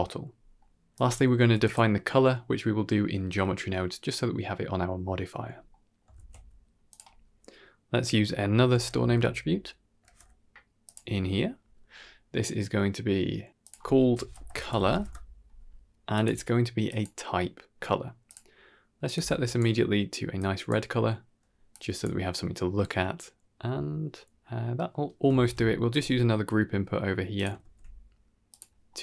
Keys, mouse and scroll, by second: 0.5 middle click, 1.0 middle click, 1.3 drag, 1.8 g, 5.2-5.8 scroll up 3, 5.6 middle drag, 6.0 shift+a, 13.5-14.9 drag, 16.0-16.9 drag, 18.1 click, 21.6 click, 22.3-23.9 scroll down 1, 23.9 scroll down 1, 24.1-24.7 middle drag, 25.2 shift+a, 25.9-26.8 scroll down 3, 26.1 middle click, 26.8 middle click, 27.2 click, 27.5 shift+d, 28.5 middle click, 28.9-29.0 scroll up 2.